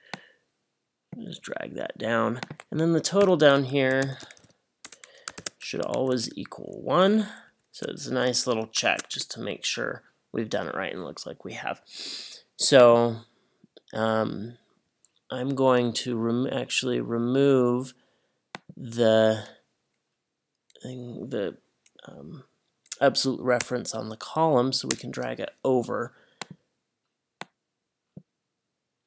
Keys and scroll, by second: 3.2-5.4 typing, 6.0 Up, 7.1 shift+Up, 7.5 shift+Up, 8.9 shift+0, 9.2 Return, 23.6 BackSpace, 25.0 Return.